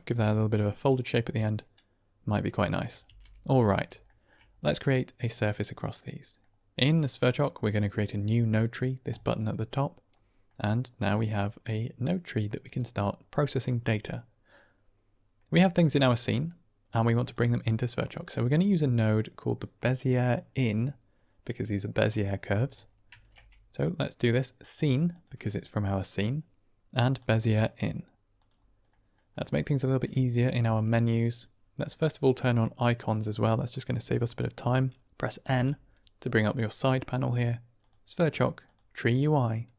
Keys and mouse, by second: 0.9-1.6 drag, 3.0 ctrl+space, 3.9-4.3 shift+drag, 5.3-6.3 middle drag, 9.0 click, 10.4 middle click, 17.2 click, 23.0 shift+a, 28.8 click, 30.5 shift+a, 35.4 n, 37.7 click, 38.5 click.